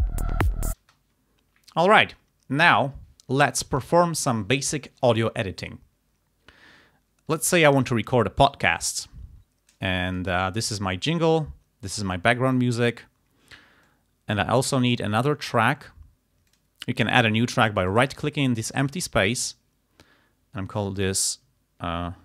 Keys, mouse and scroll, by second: 0.8 space, 7.4 click, 10.1 click, 11.1-12.2 drag, 12.8 click, 13.9 click, 15.0 right click, 16.5 click, 18.0 right click, 20.8 click.